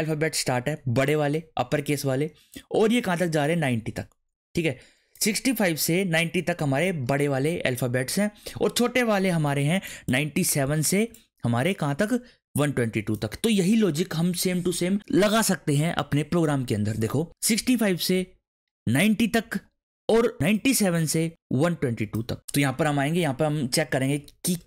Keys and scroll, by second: 23.1-24.6 typing.